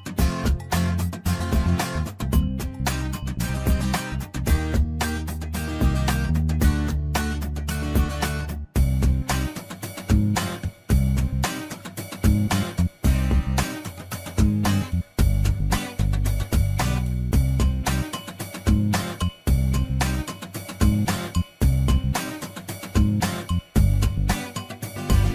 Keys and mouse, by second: 5.6 ctrl+r, 7.6 shift+middle click, 8.9-11.3 drag, 11.8 click, 12.1-13.9 drag, 14.7-16.5 drag, 17.3-19.1 drag, 21.2 shift+middle click, 21.7 click, 22.5-23.9 drag, 25.1-25.3 drag.